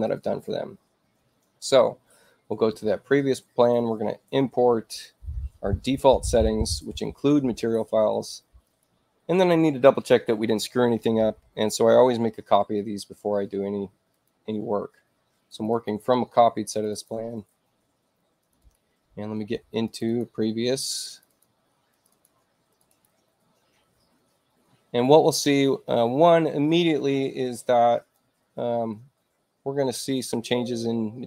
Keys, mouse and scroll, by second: 0.0 click, 5.8 click, 8.6 click, 14.0 click, 15.4 click, 15.6 click, 16.6 click, 16.8 click, 18.3 click, 18.5 click, 19.8 click, 20.0 click, 21.0 click, 21.2 click, 21.8 click, 22.6 click, 22.8 click, 27.9 click.